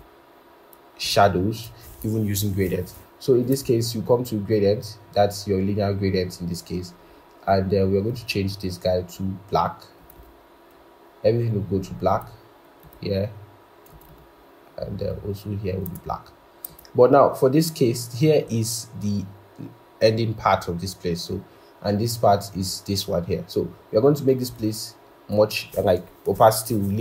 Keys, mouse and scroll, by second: 10.1 double click, 14.0 double click.